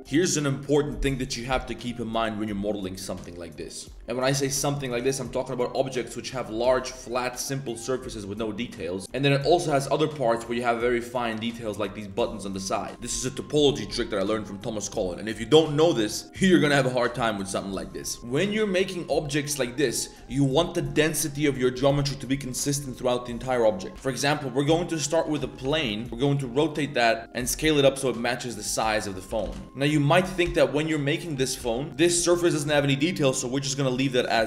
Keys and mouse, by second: 23.9 shift+a, 25.6 Tab, 25.6 r, 26.5 s, 27.2 s, 27.3 s, 28.8-31.9 typing, 30.0 middle click, 31.4 middle drag, 32.6 click, 33.2 click, 33.6 right click, 34.2 middle click.